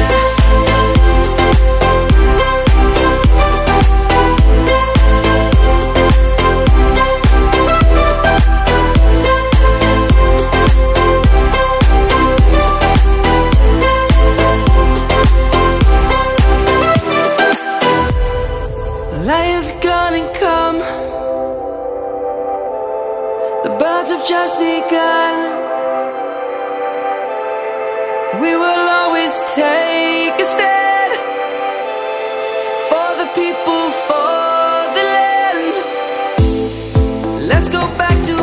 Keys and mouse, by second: 0.4 middle click, 1.4 click, 2.5 ctrl+a, 3.1 click, 4.4 1, 5.1 Tab, 5.9 middle click, 6.0 middle click, 7.6 1, 9.9 click, 12.4 ctrl+b, 23.0 g, 25.3 click, 28.4 right click, 29.1 g, 33.4 click, 34.4 middle click, 37.5 a.